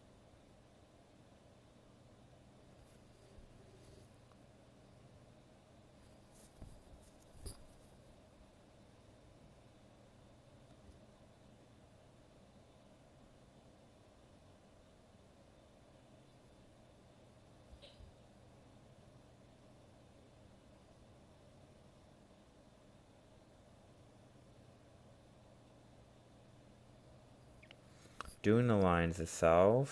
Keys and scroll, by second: 3.4 ctrl+z, 26.6 ctrl+z, 29.0 ctrl+z.